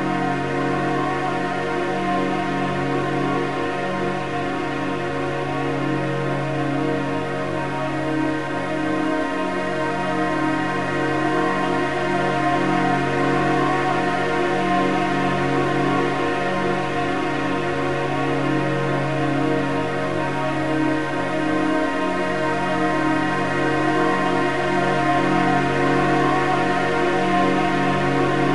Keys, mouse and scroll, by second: 0.3 click, 2.1 click, 4.9-5.7 drag, 21.1-24.0 drag.